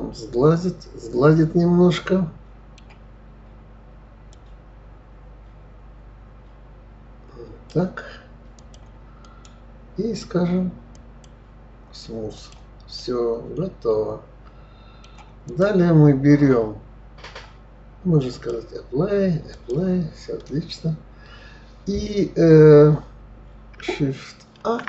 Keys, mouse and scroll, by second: 4.6-7.6 drag, 8.9 click, 9.5 right click, 11.6-12.5 right drag, 12.7 click, 13.3-15.8 middle drag, 15.8 click, 18.6 click, 19.8 drag, 20.9-22.5 scroll down 2.